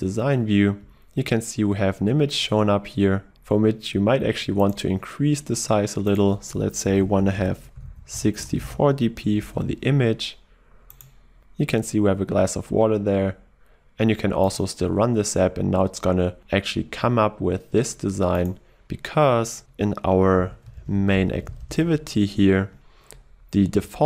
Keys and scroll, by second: 9.8 ctrl+s, 16.4 shift+F10, 20.6 ctrl+shift+super+n.